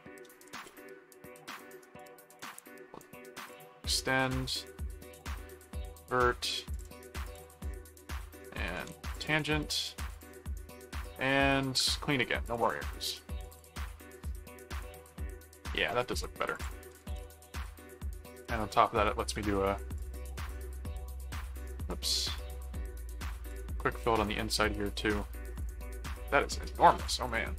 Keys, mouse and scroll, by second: 0.4 a, 0.6 click, 2.0 click, 3.5 click, 5.1 click, 5.8 click, 6.7 ctrl+click, 7.3 ctrl+click, 8.8 alt+a, 9.1 alt+click, 10.1 click, 12.4 click, 12.8 middle click, 13.5 click, 13.7 middle click, 14.5 middle click, 15.8 middle click, 16.5 click, 16.7-18.1 typing, 20.0 click, 21.8 click, 23.5 click, 24.2 right click, 25.1 middle click, 25.5 click, 27.0 click.